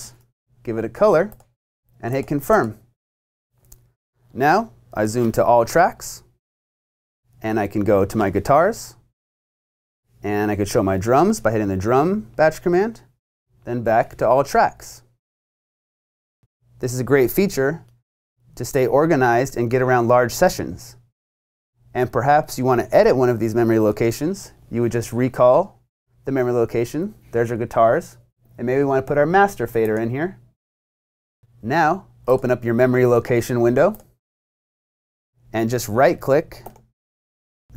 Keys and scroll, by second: 0.0-0.5 typing.